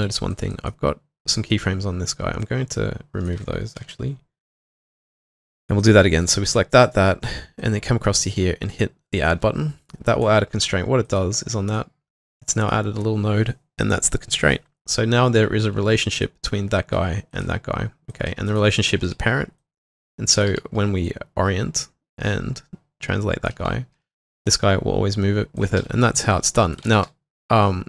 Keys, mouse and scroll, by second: 0.0-0.4 typing, 0.5 double click, 3.8 ctrl+shift+v, 5.8 double click, 6.7 shift+click, 12.6 double click, 17.3 ctrl+click, 18.5 double click, 19.1 typing, 20.5 typing, 24.0 typing, 25.6-27.3 typing.